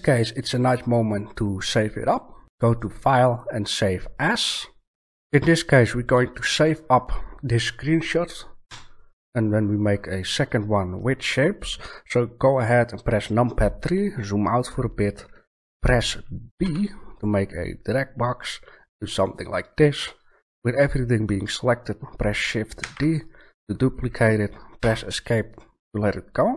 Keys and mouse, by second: 2.5 click, 8.6 KP_3, 9.0-9.6 middle drag, 14.0-15.7 middle drag, 16.6 b, 22.8 shift+d.